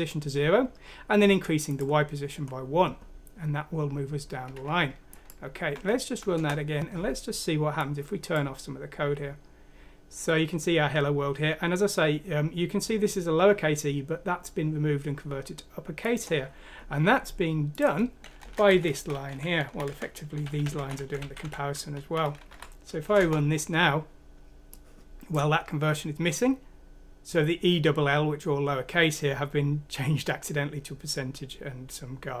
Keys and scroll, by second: 5.7 F6, 6.3 Return, 18.4 Down, 18.7 Home, 19.3 ;, 19.9 BackSpace, 20.6 ;, 20.9 BackSpace, 21.4 Up, 22.5 F6, 23.1 Return.